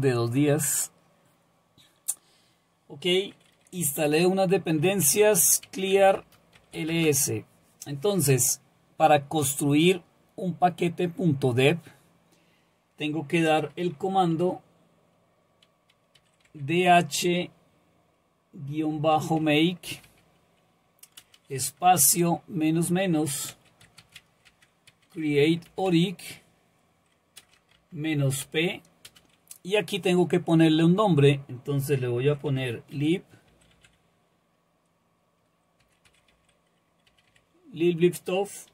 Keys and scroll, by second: 4.8-7.3 typing, 16.1 typing, 18.9-20.5 typing, 21.8 typing, 23.3-26.3 typing, 27.4-29.1 typing, 32.2-34.2 typing, 35.6-37.3 typing.